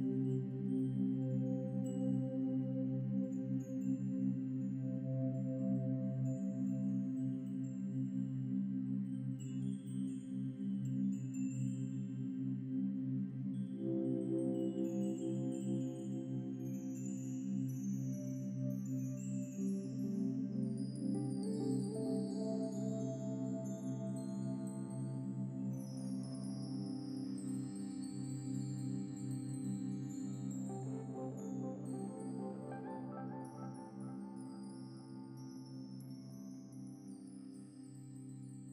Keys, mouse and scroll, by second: 0.2 shift+click, 0.9 shift+click, 1.4 scroll down 3, 1.7-2.7 shift+middle drag, 2.7 f, 3.1 scroll down 3, 3.4-6.1 middle drag, 6.1 Tab, 6.2 scroll down 2, 6.7-8.2 middle drag, 8.6-10.8 shift+middle drag, 11.6 click, 11.9 scroll down 2, 12.1-12.5 middle drag, 12.7 scroll down 1, 12.8-14.1 shift+middle drag, 14.1 click, 14.8 click, 15.9 click, 16.3 click, 25.6-26.0 drag, 29.9-30.3 shift+middle drag, 30.3 scroll up 2, 31.2-32.7 middle drag, 33.0 ctrl+s, 33.8 ctrl+s, 35.4 click, 36.2-36.8 drag, 36.8 scroll up 1, 37.1-38.0 middle drag, 38.0-38.6 drag.